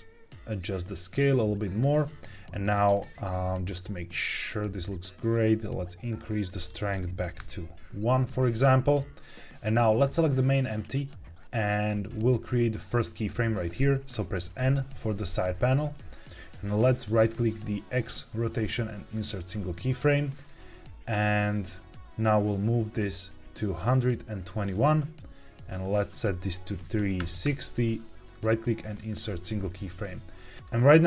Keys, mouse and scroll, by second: 1.0 s, 1.6 click, 2.5-4.1 drag, 4.1-6.4 shift+drag, 6.5 click, 10.0 click, 14.5 n, 16.2 ctrl+z, 16.2 right click, 17.9-19.2 right drag, 22.1-24.4 drag, 25.7-27.4 drag, 28.0 right click, 28.2 click, 28.2 right click, 30.6-31.0 drag.